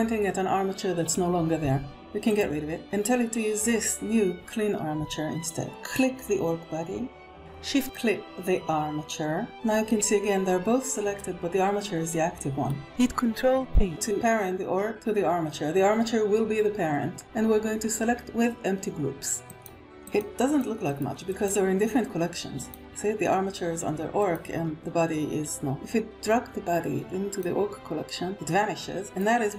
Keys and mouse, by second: 2.5 click, 10.1-11.4 middle drag, 12.3 middle click, 13.5 ctrl+p, 19.9 click, 20.4 click, 21.2 click, 24.1-25.7 drag, 28.9 click.